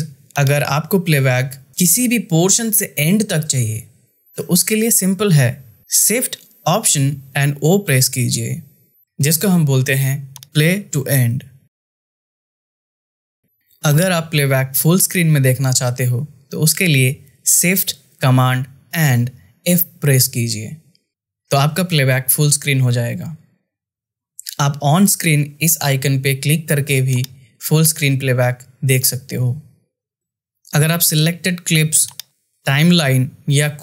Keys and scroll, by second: 6.9 shift+o, 21.0 f.